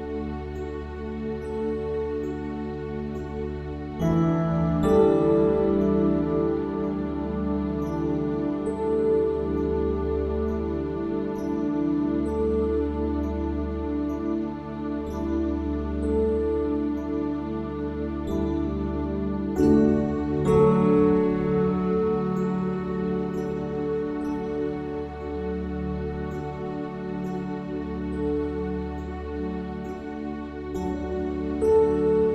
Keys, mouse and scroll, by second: 0.5 middle click, 1.0-2.1 drag, 1.9 e, 3.2 alt+s, 7.4 middle click, 9.3 Tab, 10.1-11.5 middle drag, 11.6 KP_1, 12.6 Tab, 15.5 middle click, 16.7 click, 17.5 middle click, 18.0 click, 19.3 click, 20.6 KP_7, 21.7 s, 22.9-24.0 middle drag, 24.7 middle click, 25.3-27.1 drag, 27.5 click, 28.6 click, 30.2 click, 32.1 alt+s.